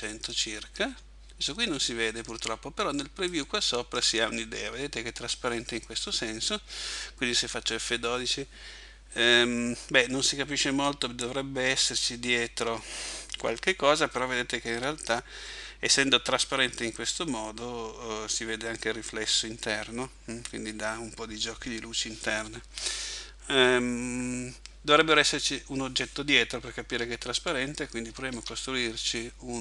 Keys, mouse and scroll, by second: 3.3 click, 26.9 Escape, 28.3 shift+a.